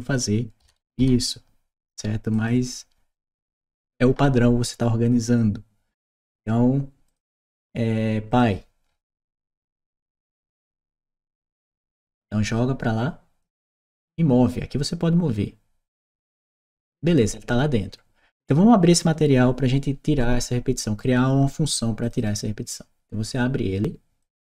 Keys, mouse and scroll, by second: 2.1 click, 6.9 click, 8.1 click, 9.1 shift+p, 10.1 shift+e, 10.6 shift+d, 11.3 click, 12.4-13.5 drag, 15.9 click, 18.8 click, 21.9 click, 22.0 click, 24.1 click, 24.2 click.